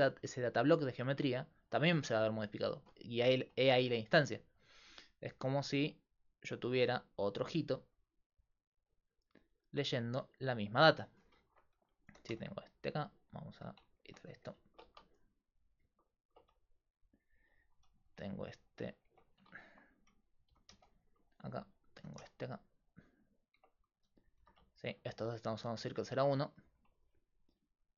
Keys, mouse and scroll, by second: 5.0 d, 5.5 d, 5.7-11.2 d, 12.1 g, 13.6 a, 14.1 Tab, 14.3 a, 14.9 a, 16.4 x, 18.1 g, 19.1 Tab, 20.5 g, 22.0 g, 23.6 Tab, 24.1 a, 24.4 a, 24.7 click, 25.3 x.